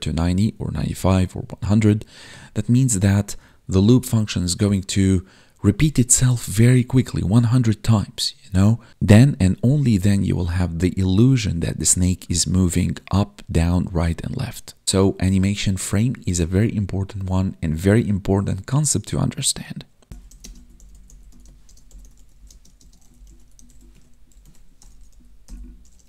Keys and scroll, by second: 20.3 space, 22.4 space, 22.7 space, 23.9 Tab.